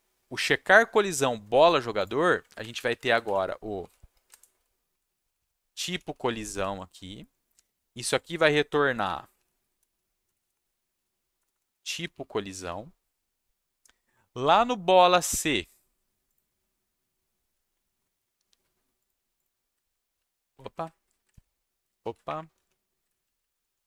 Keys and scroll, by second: 2.6 ctrl+shift+Down, 2.8 alt+Left, 3.0 alt+Left, 3.8-7.0 typing, 4.1 Caps_Lock, 8.7-13.1 typing, 19.8 shift+Down, 19.8 shift+Right, 20.1 Left, 20.7 ctrl+z, 21.3 shift+Down, 22.0 ctrl+z, 22.2 Up, 22.5 Down, 23.0 ctrl+shift+Down, 23.2 Left, 23.5 Left, 23.6 Left.